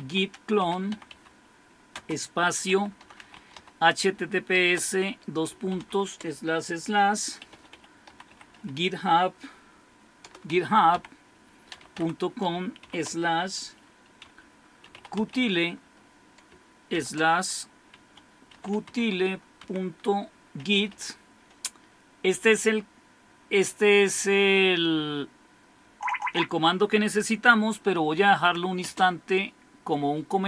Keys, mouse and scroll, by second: 0.0-4.6 typing, 5.8 typing, 7.2-9.0 typing, 10.2-12.9 typing, 14.2-15.8 typing, 17.0-21.4 typing, 23.2-26.0 typing, 27.9-28.8 typing.